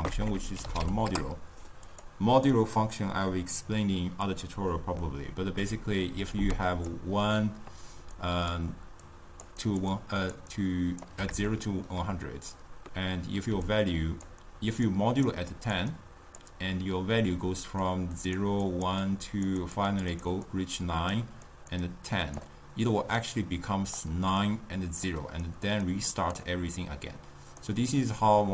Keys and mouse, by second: 0.2 BackSpace, 0.3 BackSpace, 2.6-5.1 drag, 5.1-6.3 middle drag, 6.3-11.2 typing, 6.4 click, 8.3 click, 9.1 click, 9.6 click, 10.0 click, 10.6-11.1 drag, 11.6-13.6 shift+middle drag, 13.6-27.6 typing, 13.7 click, 14.9 right click, 15.6 click, 16.0-16.4 drag, 17.9 click, 18.7 click, 19.1 click, 19.7 click, 20.0 click, 20.2 click, 20.5-21.2 drag, 21.5 click, 21.9 click, 23.3 right click, 24.5 click, 25.5 click, 26.0 click, 27.7-28.5 right drag.